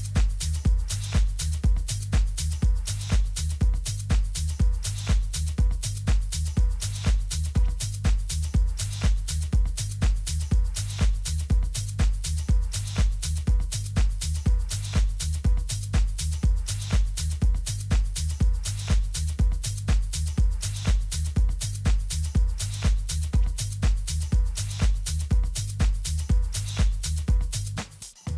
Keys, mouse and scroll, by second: 1.3-4.7 drag, 4.9-8.0 middle drag, 8.1 n, 8.6-11.4 middle drag, 9.2 z, 13.0 a, 13.4 a, 17.2-20.6 middle drag, 20.6-22.5 drag.